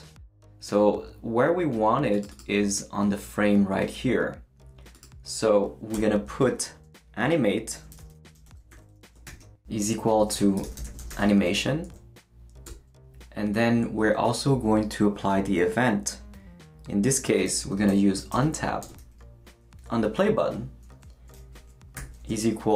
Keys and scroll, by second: 5.9 Return, 7.5-11.7 typing, 11.8 Right, 12.7 Return, 17.5-18.8 typing, 22.0 =.